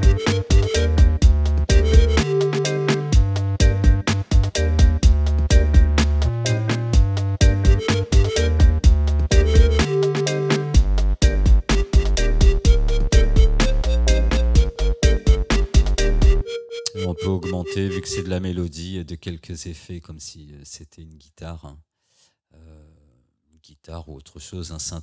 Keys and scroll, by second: 19.6 space.